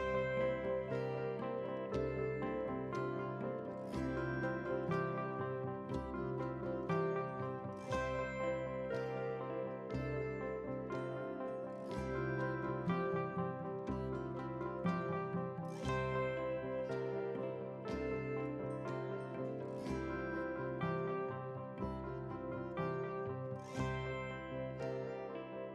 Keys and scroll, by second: 7.7 ctrl+g.